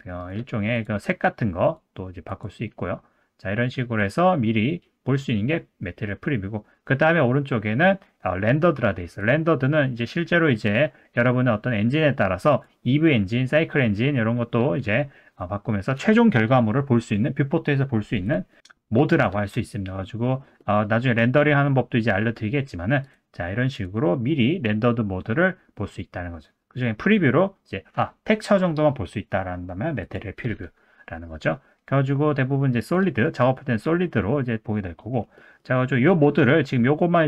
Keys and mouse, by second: 9.3 click, 10.7 click, 12.6-15.2 drag, 18.4-19.4 drag, 19.7-20.3 middle drag, 20.6 middle drag, 22.3 middle click, 23.1-23.9 drag, 30.0 click, 30.6-31.3 middle drag, 32.8 click, 33.2 middle click, 34.2 middle click, 35.3 middle click.